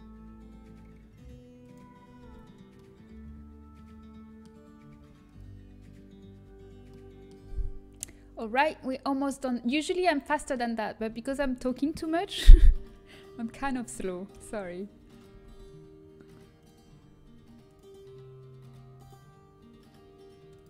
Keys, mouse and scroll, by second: 1.9-6.3 middle drag, 7.9 KP_1, 11.1 z, 11.5 a, 13.5 b, 14.3 KP_1, 17.7 g.